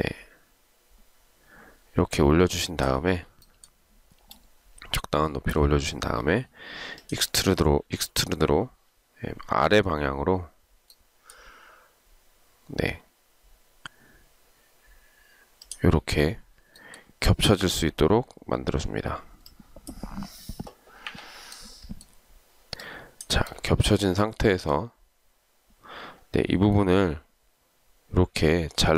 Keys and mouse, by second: 21.3 Delete.